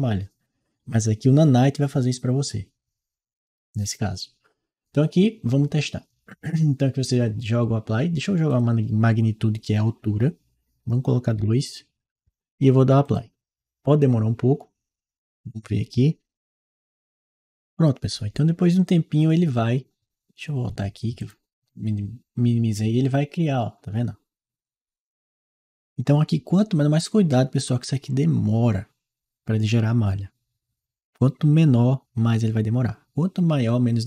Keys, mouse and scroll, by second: 8.3 click, 11.2 2, 12.9 click, 16.9 click, 21.0 click.